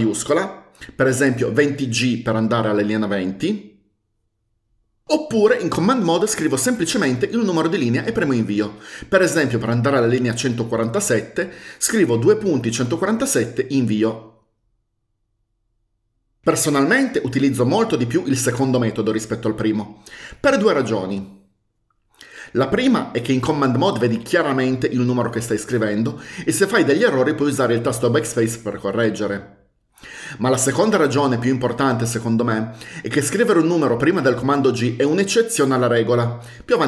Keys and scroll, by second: 1.7-2.8 typing, 12.2-13.6 typing, 13.6 Return.